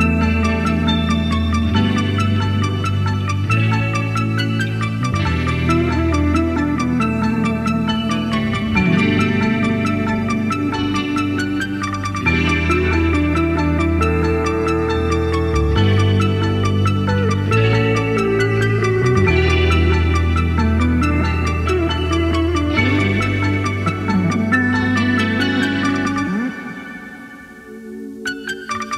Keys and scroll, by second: 2.4-3.1 typing, 3.2-12.7 Left, 6.4-7.2 typing, 10.3 typing.